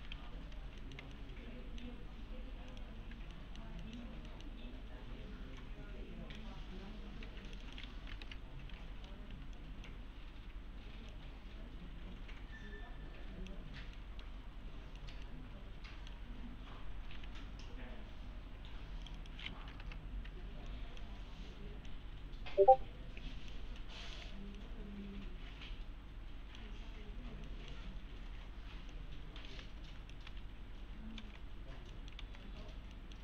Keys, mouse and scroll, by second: 0.0-0.6 typing, 0.4 scroll down 1, 1.2-2.1 alt+middle click, 2.0 scroll up 1, 2.7 click, 3.4 alt+middle click, 3.7 scroll up 1, 3.8 middle click, 4.3 alt+middle click, 4.5-5.0 scroll down 1, 5.1 1, 5.6-6.5 click, 7.2 2, 7.5 click, 9.3 1, 9.6 click, 13.7 scroll down 1, 13.9 scroll up 1, 14.0 middle click, 14.5-15.0 scroll up 1, 15.0 middle click, 15.3-16.2 alt+middle click, 18.6 2, 19.0 click, 20.4 1, 20.7 click, 23.8-24.4 middle click, 24.6-26.8 alt+middle click, 27.1-27.5 scroll up 1, 27.5 middle click, 27.9 scroll down 1, 28.9-30.2 click, 29.5-30.9 typing, 31.2 alt+x, 31.9 middle click, 32.2 alt+x, 32.9 middle click.